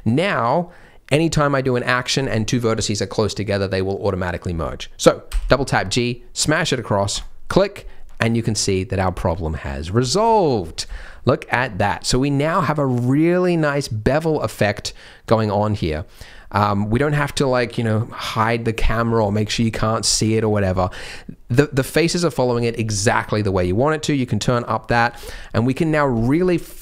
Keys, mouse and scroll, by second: 5.3 g, 8.2 scroll down 2, 8.5 middle click, 10.0 Tab, 10.3 shift+middle click, 10.5 scroll up 3, 10.9 shift+middle click, 11.2 middle click, 11.8 middle click, 13.8 middle click, 15.0 middle click, 16.3 middle click, 19.3 scroll down 1, 19.5 middle click, 20.1 scroll up 1, 20.4 middle click, 20.7 shift+middle click, 21.4 middle click, 24.4 click, 24.8 middle click, 25.2 Tab, 25.3 middle click, 26.2 alt+click, 26.4-26.8 scroll down 5.